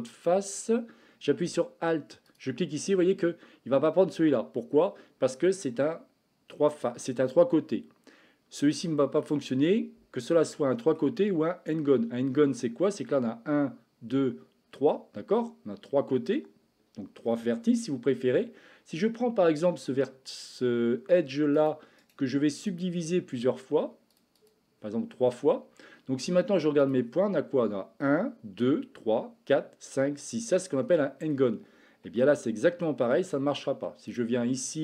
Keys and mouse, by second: 10.5 shift+middle click, 32.2 shift+middle click, 34.2-34.8 drag.